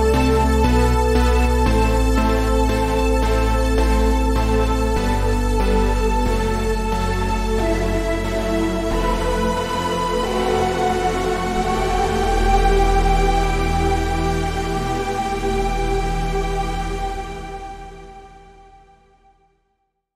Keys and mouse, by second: 1.6 a, 4.3 shift+c, 6.7 KP_5.